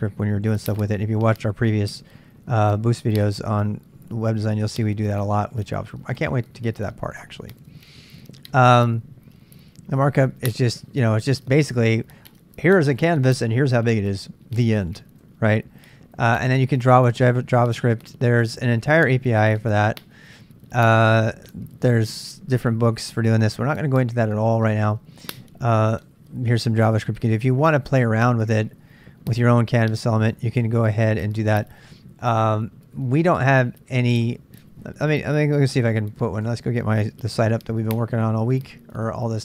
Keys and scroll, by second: 7.7 j, 7.9 j, 10.8 j, 15.2 j, 36.4 super+Tab, 37.4 super+Tab.